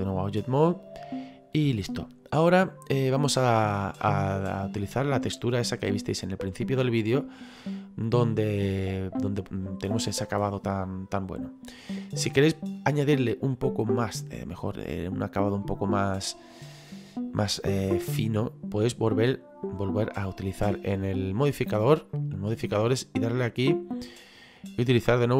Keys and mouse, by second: 3.5 shift+middle click, 4.7 middle click, 12.8 middle click, 15.6 middle click, 22.1 click, 23.2 click.